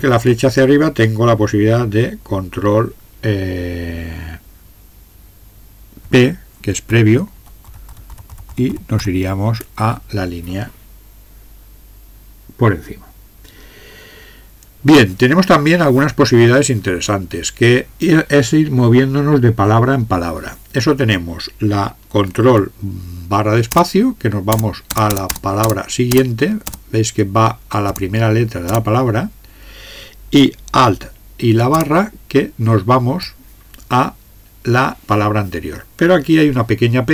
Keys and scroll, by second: 0.0 Up, 0.2 Up, 6.9 ctrl+p, 7.4 ctrl+p, 7.6 ctrl+p, 7.9 ctrl+p, 8.7 ctrl+p, 9.2 ctrl+p, 23.7 ctrl+space, 24.5 ctrl+space, 24.9 ctrl+space, 25.1 ctrl+space, 25.3 ctrl+space, 25.6 ctrl+space, 26.1 ctrl+space, 26.6 ctrl+space, 27.9 ctrl+space, 28.7 ctrl+space, 31.8 alt+space.